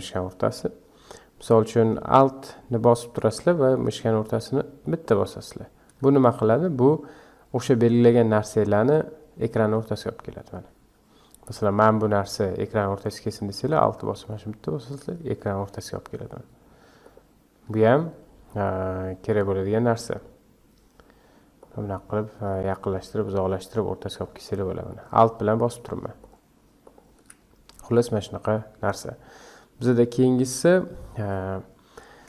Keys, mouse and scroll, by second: 4.8 alt+middle click, 9.6 alt+middle click, 14.3 alt+middle click, 17.0 alt+middle click, 18.6 alt+middle click, 20.1 alt+middle click, 21.6 alt+middle click, 22.5 alt+middle click, 23.2 alt+middle click, 24.1 alt+middle click, 24.9 alt+middle click, 25.5 alt+middle click, 26.2 alt+middle click, 26.8 alt+middle click.